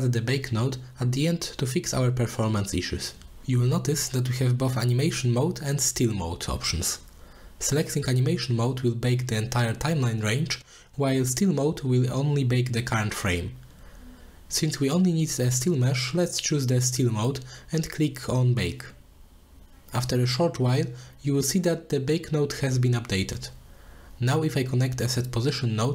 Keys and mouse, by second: 8.3 click, 16.1 click, 16.6-17.5 drag, 19.8 click, 21.2 middle click, 21.8 click, 23.0 shift+a, 25.8 shift+a.